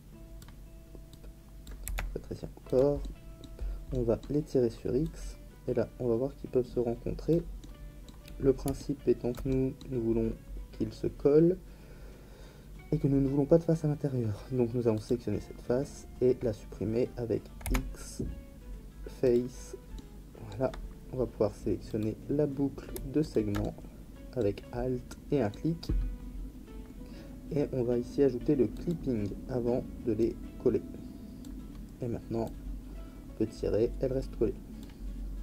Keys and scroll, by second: 1.8 s, 17.6 x.